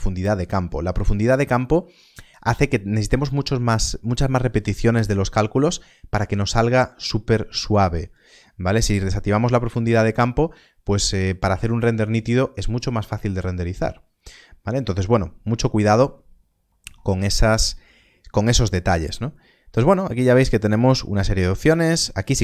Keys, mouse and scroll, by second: 17.5 scroll down 1, 19.3 middle click, 21.8 click.